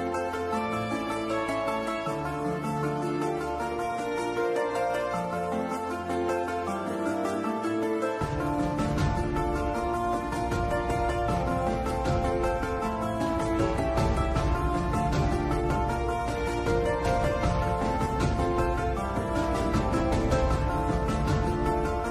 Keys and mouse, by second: 9.3 click, 9.5-13.3 drag, 15.3 KP_Divide, 16.7 click, 17.8 middle click, 19.2 Tab.